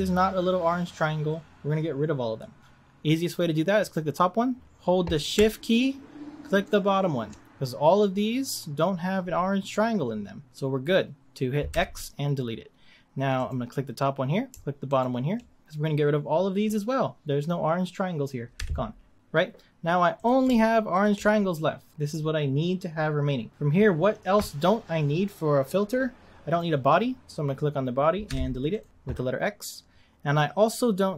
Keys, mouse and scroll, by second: 3.8 click, 6.5 shift+click, 11.8 x, 13.4 click, 14.9 shift+click, 18.5 x, 20.1 click, 20.9 shift+click, 26.5 click, 28.2 x.